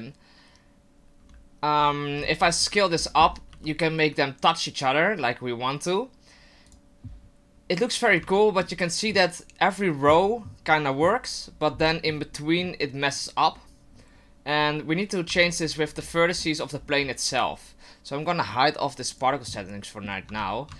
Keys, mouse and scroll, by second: 1.8-2.9 scroll down 8, 2.7 right click, 2.9-3.6 scroll up 10, 3.5 s, 7.1-7.4 scroll down 2, 8.4 shift+middle click, 8.7 shift+middle click, 15.3 Tab, 15.9 Tab, 16.3-18.9 scroll down 11, 17.3 right click, 19.1 click, 19.5 middle click, 20.2 Tab.